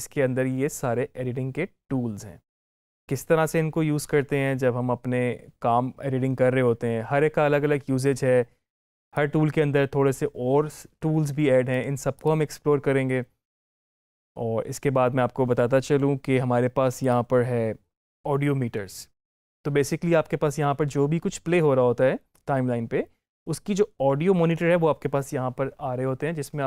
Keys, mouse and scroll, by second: 9.0-12.0 drag, 16.9 click.